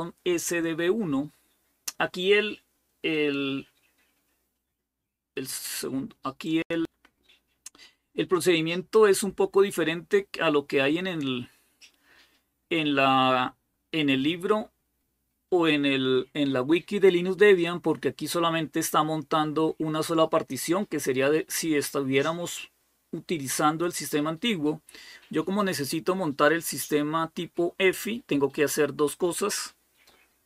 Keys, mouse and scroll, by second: 6.2 click, 8.4 click, 9.4-9.8 scroll down 1, 18.1-23.0 scroll down 1.